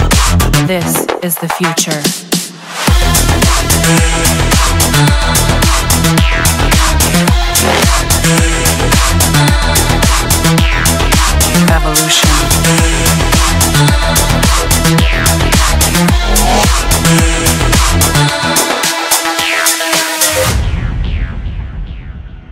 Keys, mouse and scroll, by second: 3.9-4.8 typing, 5.2 Return, 10.7-11.8 drag, 12.5 click, 16.7-17.6 typing, 18.0 Return.